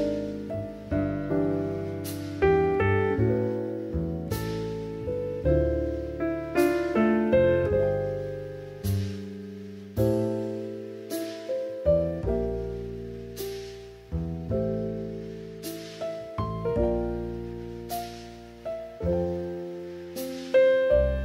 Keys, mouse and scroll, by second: 0.8 Tab, 1.3 alt+z, 1.7 middle click, 3.2 ctrl+r, 5.2 ctrl+r, 5.2 click, 7.2-9.7 drag, 9.9 alt+shift+click, 11.2 x, 13.1 middle click, 14.1 shift+middle click, 16.8 click, 18.4 alt+z, 18.8 click, 19.6 shift+middle click, 20.3-21.2 drag.